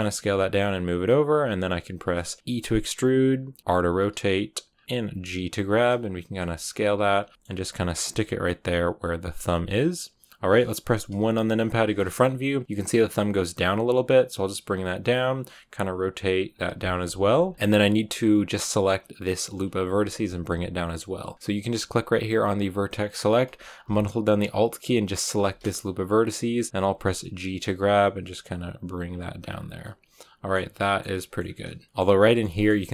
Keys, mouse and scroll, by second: 0.0-0.1 typing, 2.5 e, 3.6 r, 4.9 g, 6.2-9.6 typing, 7.3 shift+middle click, 7.3 scroll up 1, 11.6 KP_1, 13.7 g, 15.2 r, 16.0 g, 16.5 r, 16.8 g, 17.5-22.4 scroll up 2, 22.4-25.1 drag, 25.1-26.7 alt+right drag, 26.7 g, 29.2-29.7 scroll down 6, 29.7-30.9 middle drag, 30.9-31.4 scroll up 4, 31.0 middle click, 31.8-32.9 middle drag.